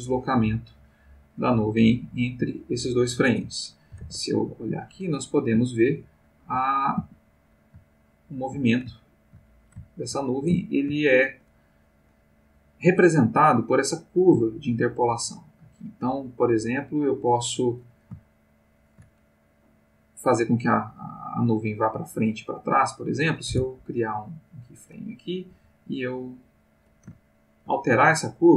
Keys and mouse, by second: 0.8-3.5 drag, 4.0 ctrl+Tab, 5.3-6.7 ctrl+middle drag, 6.8 ctrl+middle click, 7.0 ctrl+a, 7.5-11.5 ctrl+middle drag, 11.8 middle click, 17.6 click, 18.6 shift+click, 22.1 click, 23.5 i, 24.0 click, 24.6 click, 25.5 g, 26.5 click, 27.2 ctrl+middle click, 28.3-28.5 drag.